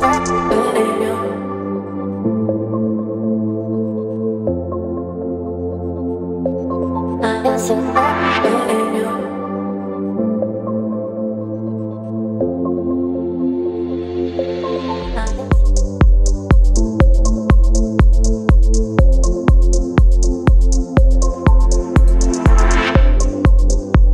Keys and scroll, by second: 2.8 space, 5.4 ctrl+g, 8.7 v, 13.6 Down, 13.7 Down, 14.3 space, 16.3 ctrl+t, 19.5 Return, 21.1 space, 21.6 ctrl+t, 23.7 Return.